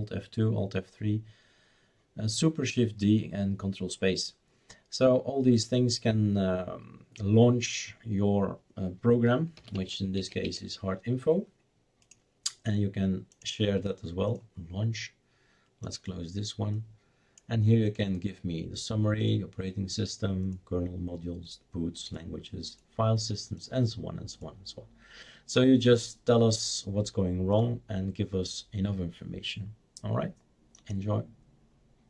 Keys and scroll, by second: 9.3-10.9 typing.